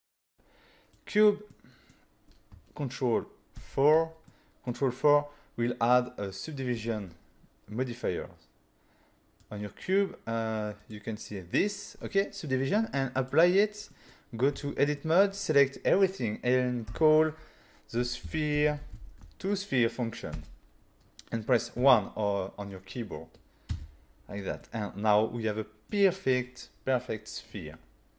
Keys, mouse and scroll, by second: 1.1 click, 1.5 middle click, 1.9 shift+a, 3.6 ctrl+', 4.3 middle click, 9.4 click, 10.8 click, 13.2 click, 13.9 middle click, 14.0 scroll up 1, 14.1 middle click, 14.5 Tab, 15.0 middle click, 16.9 F3, 18.0-18.9 typing, 20.3 Return, 21.8 1, 23.7 Return, 24.6 middle click.